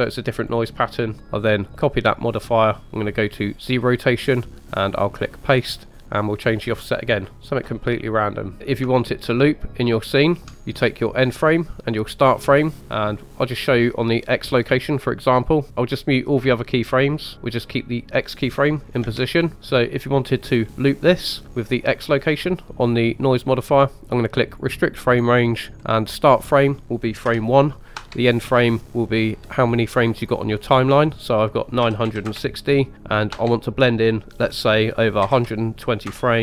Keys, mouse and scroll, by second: 1.6 click, 3.5 click, 5.1 click, 6.2-8.6 drag, 6.2 typing, 8.6 scroll down 5, 8.9-10.5 ctrl+middle drag, 14.5 click, 15.7 click, 16.8 click, 18.3 click, 19.0 space, 19.6 space, 22.3 click, 24.5 click, 25.1 click, 25.5-26.1 scroll down 3, 26.2-36.4 drag.